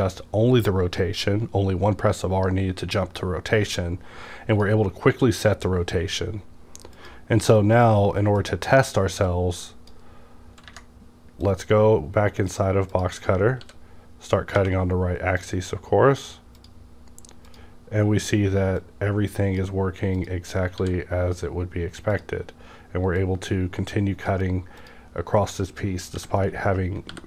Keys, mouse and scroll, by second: 6.9 click, 8.4-13.6 drag, 13.6 w, 14.5 _, 15.4 click, 15.4-20.8 drag, 20.8 w, 22.1 click, 23.2-26.1 drag, 26.1 b, 26.7-27.1 scroll down 1, 27.1 t.